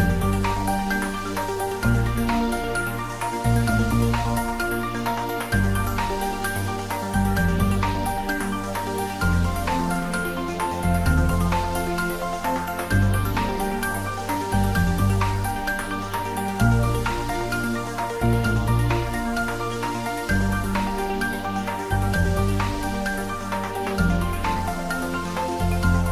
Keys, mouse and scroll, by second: 3.9 click, 7.9 click, 8.0-10.0 scroll up 1, 9.8-10.7 typing, 13.0-15.0 scroll down 1, 16.0 x, 19.1 click, 19.8 scroll down 1, 22.9-24.7 scroll down 1, 25.2-26.1 middle drag.